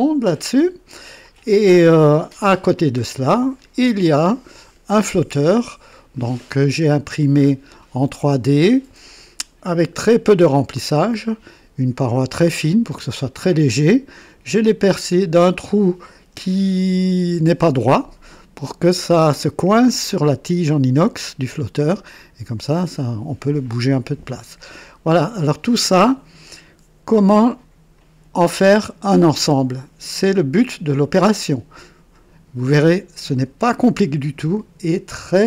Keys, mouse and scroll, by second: 3.1 click, 4.0-6.3 drag, 6.9-7.8 right drag, 14.2-15.9 drag, 16.9 KP_1, 24.6-25.7 drag.